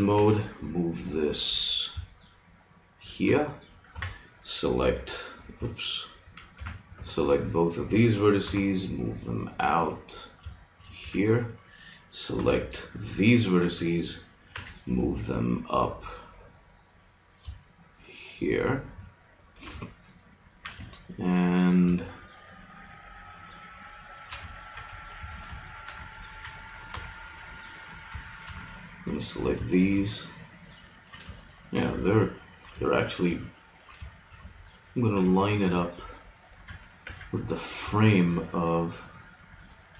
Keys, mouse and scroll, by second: 0.2 g, 4.0 Tab, 5.6 Tab, 6.6 a, 7.0 b, 8.4 g, 11.0 a, 12.4 b, 14.5 g, 18.9-20.6 drag, 20.6-25.2 middle drag, 25.2 a, 26.9 b, 28.1 click, 31.4-34.1 middle drag, 37.0 g, 37.6 middle click, 39.6 middle click.